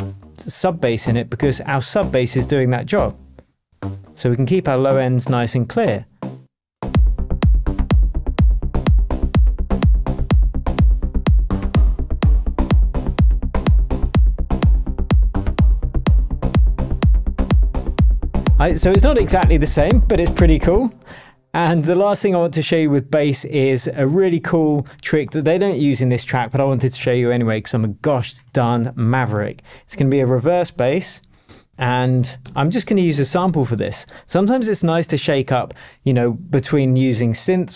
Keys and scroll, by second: 20.7 space, 24.6 super+d, 26.2 super+s, 29.3 super+t, 30.3 super+r, 31.2-33.5 typing.